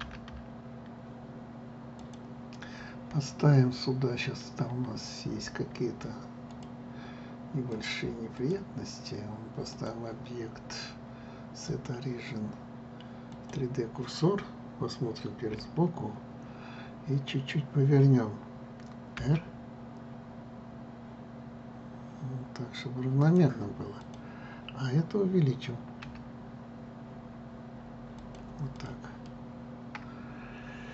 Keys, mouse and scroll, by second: 0.7 r, 2.7 click, 7.2 click, 8.4-13.5 drag, 16.2 KP_1, 19.9 r, 24.7 click, 26.7 s, 29.4 click, 29.9-30.9 middle drag.